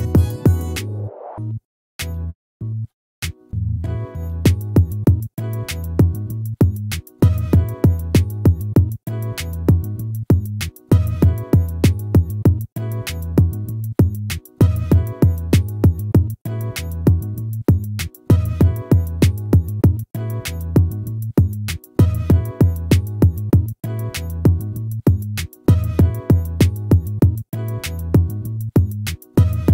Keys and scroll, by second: 5.8 ctrl+z, 8.8 ctrl+-, 14.0 ctrl++, 19.5 ctrl+z, 22.2 ctrl+z.